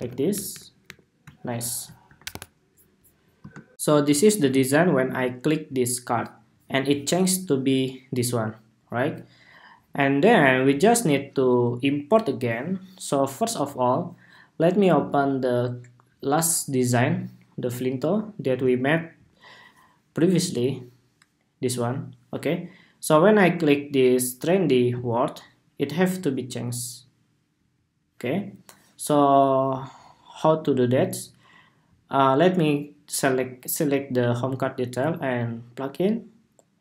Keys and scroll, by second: 3.4 shift+super+2.